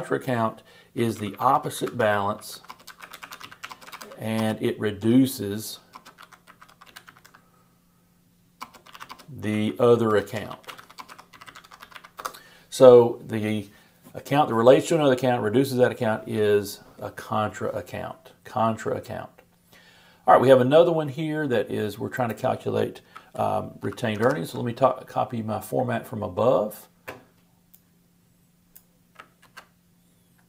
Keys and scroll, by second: 23.8 shift+super+=, 29.4 super+c.